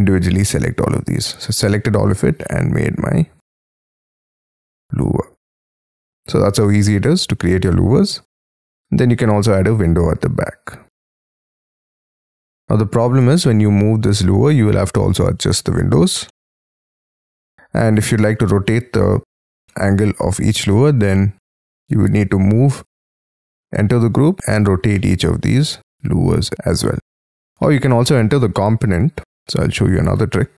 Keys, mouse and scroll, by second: 0.1-1.0 scroll down 5, 1.5 g, 2.2 scroll up 4, 2.4 middle click, 3.4 scroll down 8, 3.9 middle click, 8.5-9.1 scroll up 12, 10.0-10.6 scroll down 13, 11.2 scroll down 6, 11.6 middle click, 12.6 m, 14.0 shift+click, 14.5 space, 16.2 middle click, 17.7-18.5 scroll up 17, 19.6 middle click, 20.6 double click, 20.9 double click, 22.4-23.3 scroll up 5, 23.3 scroll down 1, 24.3 q, 24.4 space, 24.9 middle click, 26.7 scroll down 5, 27.4 double click, 28.2-28.9 scroll up 6, 28.9 y, 29.1 scroll up 2, 29.3 middle click, 29.9 l.